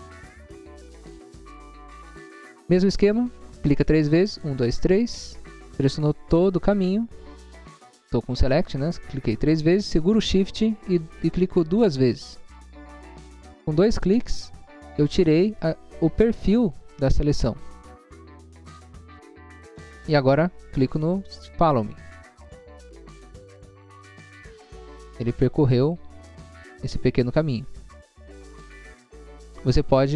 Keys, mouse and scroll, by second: 0.2 scroll down 1, 1.7 space, 2.5-3.1 scroll up 2, 4.3 click, 4.5 click, 4.7 click, 5.6 click, 5.6 scroll down 1, 6.6 scroll down 1, 8.0 scroll up 1, 8.7 scroll up 1, 21.7 click, 22.8 click, 24.2 click, 24.8 scroll down 1, 25.4 scroll down 1, 27.8 scroll down 1, 28.5 scroll down 1, 29.9 space.